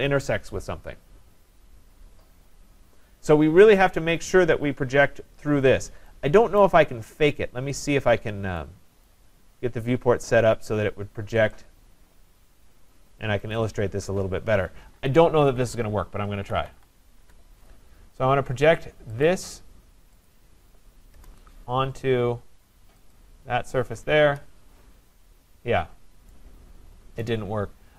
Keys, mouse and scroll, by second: 6.6 right click, 6.9-7.8 scroll, 7.8 scroll down 4, 7.8 right click, 8.2 scroll up 4, 9.1 right click, 9.3-11.4 scroll up 3, 11.4 right click, 11.9-13.1 scroll, 13.5 click, 15.4-17.2 typing, 19.3 click, 20.3 click, 21.2 Return, 21.6-22.2 scroll, 23.1 click, 24.2 Return, 27.2 right click.